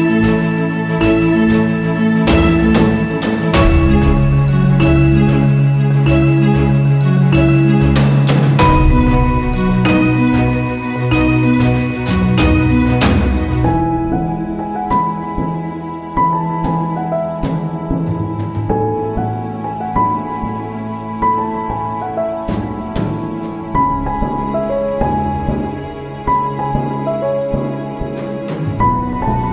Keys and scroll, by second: 0.0 z, 3.7 j, 8.2 z, 10.5 j.